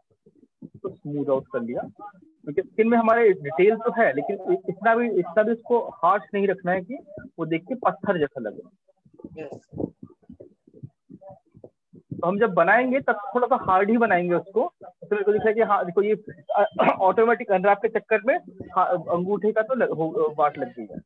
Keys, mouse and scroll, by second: 0.5 alt+click, 2.4 click, 3.6 alt+click, 4.5 click, 5.5 click, 7.4 click, 8.5 alt+click, 9.4 click, 14.5 click, 15.4 alt+click, 16.4 alt+click, 19.4 click.